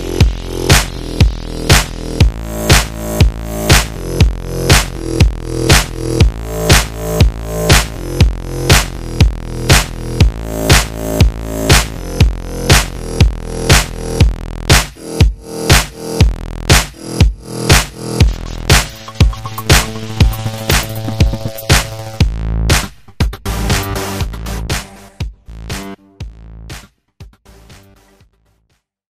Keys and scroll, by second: 2.2 super+z, 19.3 super+=, 19.6 super+=, 20.4 super+-, 20.8-21.6 typing.